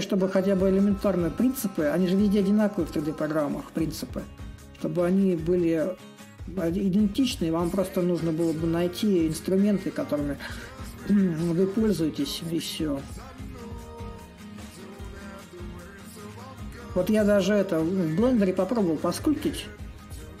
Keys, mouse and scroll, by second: 1.1-6.1 drag, 7.1-12.1 drag, 13.9-17.9 drag, 19.0-20.4 drag.